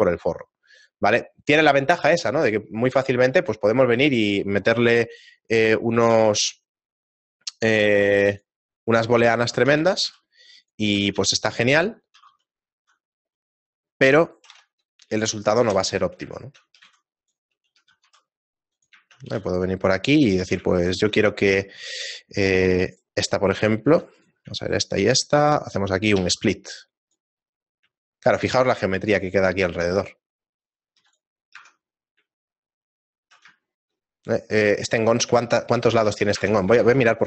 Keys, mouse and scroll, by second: 3.0 middle click, 3.8 shift+middle click, 4.9 KP_1, 6.1 shift+a, 9.1 middle click, 9.2 shift+middle click, 9.7 r, 10.9 s, 12.1 r, 16.3 shift+middle click, 16.9 g, 17.8 g, 19.2 g, 20.7 shift+middle click, 22.9 shift+right click, 23.3 shift+middle click, 24.5 right click, 24.6 shift+right click, 26.2 q, 28.2 shift+middle click, 28.8-29.8 scroll up 2, 29.8-30.6 scroll up 2, 30.6 right click, 31.0 x, 32.4 Tab, 32.4 shift+middle click, 34.4 ctrl+middle click, 34.4 right click, 35.7 ctrl+Tab, 36.5 ctrl+Tab.